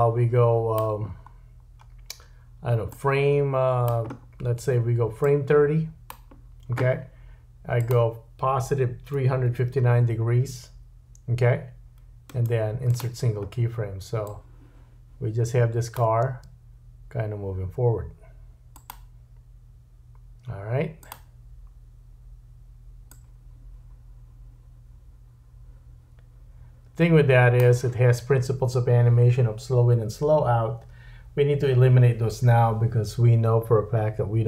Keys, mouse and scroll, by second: 1.1-2.4 scroll down 5, 2.9 click, 4.1-5.2 scroll down 3, 5.2 click, 7.8 click, 12.2 right click, 14.3 click, 16.2 space, 18.8 click, 21.0 click, 23.1 click.